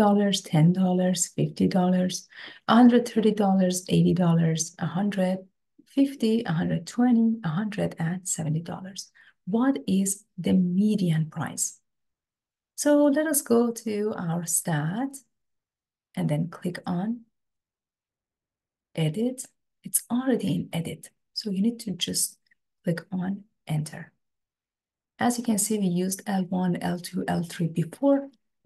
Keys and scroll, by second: 22.2 Return, 28.3 Right.